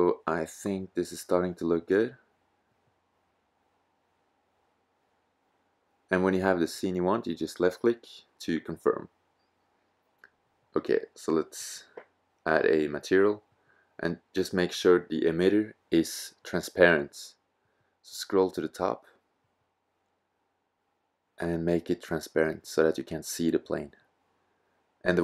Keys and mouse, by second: 9.8-11.5 drag, 12.3-15.4 drag.